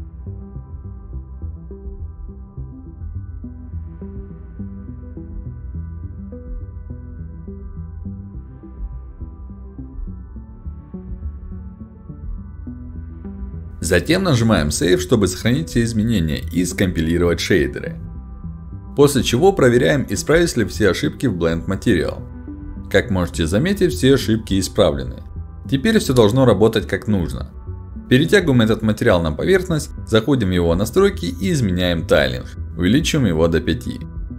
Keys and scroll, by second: 23.7 ctrl+alt+d.